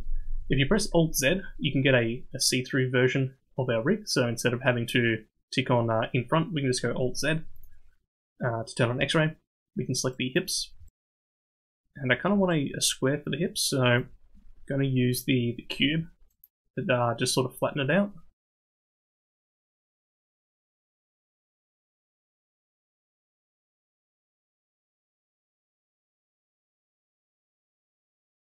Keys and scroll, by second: 0.3 alt+z, 11.7 ctrl+Tab, 26.1 KP_3, 27.2 BackSpace.